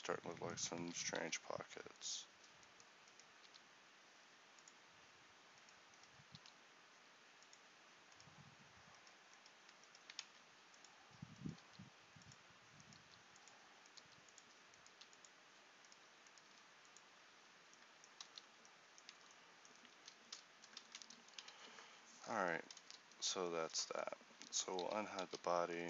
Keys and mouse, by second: 1.0 g, 3.6 g, 10.3 ctrl+t, 11.7 g, 18.3 ctrl+z, 19.2 Tab, 20.0 a, 24.9 alt+h, 25.4 a.